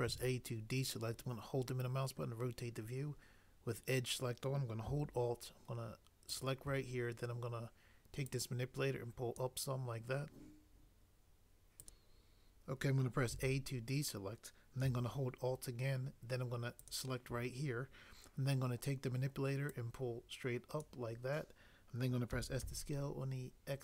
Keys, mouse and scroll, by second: 0.0 a, 6.3 click, 13.3 a, 22.4-22.7 typing.